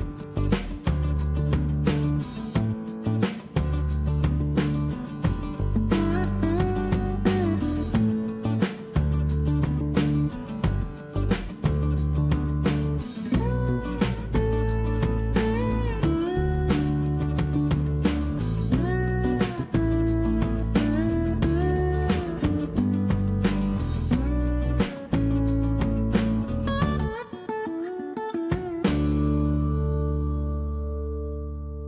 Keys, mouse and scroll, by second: 9.2 space, 9.7 e, 13.3 shift+space, 14.8 m, 17.6 shift+q, 21.7 shift+space, 24.1 m, 26.7 space, 28.3 space, 31.6 m.